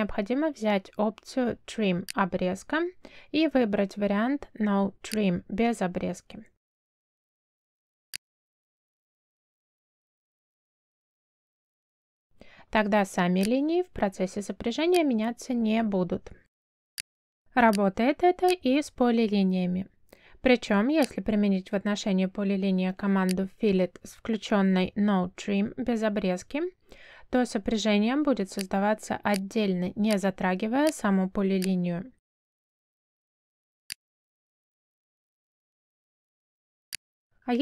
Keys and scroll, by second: 0.4 space, 9.3 r, 10.2 space, 11.3 3, 11.5 0, 11.9 Return, 22.5 Escape, 24.2 space, 26.6 r, 26.9 space, 33.0 Escape, 35.6 Escape.